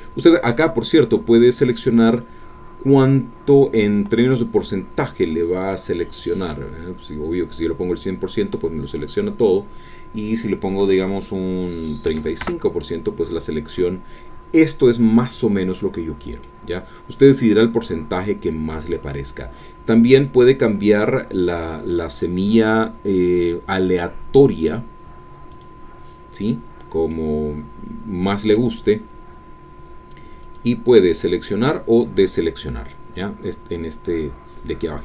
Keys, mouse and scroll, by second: 6.5-8.5 drag, 9.2 click, 12.1 KP_3, 12.2 KP_5, 12.4 KP_Enter, 14.1 scroll down 2, 14.1-16.8 middle drag, 16.8-19.5 scroll up 4, 25.5 click, 27.1-30.0 middle drag, 30.4 click.